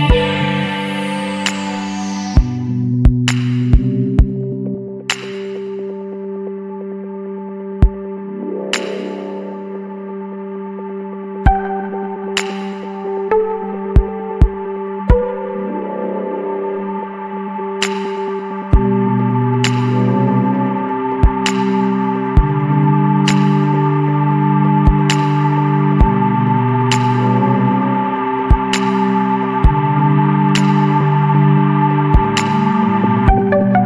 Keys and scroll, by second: 0.0 ], 1.1-3.9 typing, 5.7 space, 6.3 space, 7.3 ctrl+-, 7.6 space, 7.9 ctrl+-, 23.7 s, 31.0 Return.